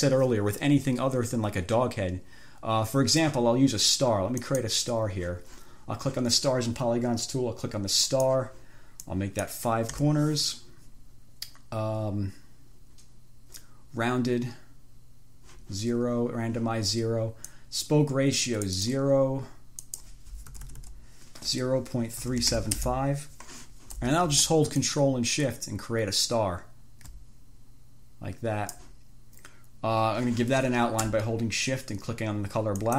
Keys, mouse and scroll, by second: 4.7 click, 8.3 click, 9.4 click, 10.2 5, 17.7-19.3 drag, 20.1 click, 20.7 BackSpace, 22.2-23.3 typing, 25.1-29.2 ctrl+shift+drag.